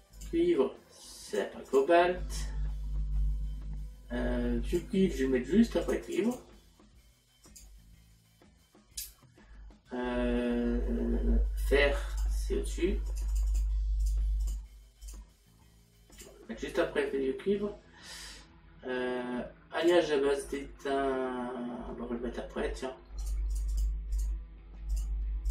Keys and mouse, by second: 0.2 click, 1.3 click, 5.9 click, 7.6 click, 12.1 click, 16.2 click, 19.9 click, 23.8 click.